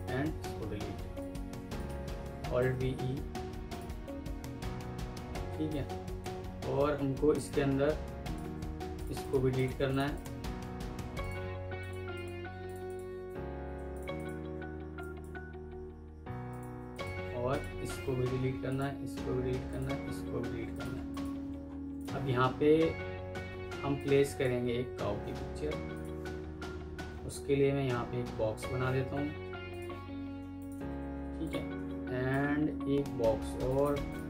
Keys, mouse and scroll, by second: 0.2 Delete, 1.1 ctrl+click, 2.5 alt+v, 2.6 typing, 3.2 Escape, 5.0 F2, 6.2 Escape, 8.1 ctrl+click, 9.1 double click, 9.4 ctrl+click, 9.8 ctrl+click, 10.0 double click, 10.7 ctrl+u, 12.0 ctrl+click, 12.7 double click, 13.5 ctrl+u, 14.0 double click, 14.9 ctrl+click, 16.0 Delete, 16.8 ctrl+click, 18.2 Delete, 18.8 Delete, 20.6 ctrl+click, 21.5 alt+scroll up 1, 21.8 alt+click, 23.2 F2, 24.5 Escape, 30.5 shift+click, 33.6 shift+right click.